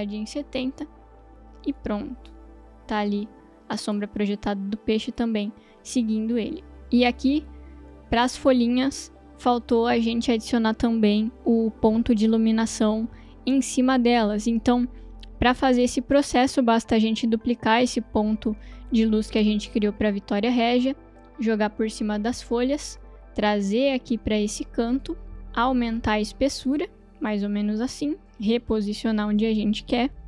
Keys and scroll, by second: 0.0-0.1 typing, 20.0 d.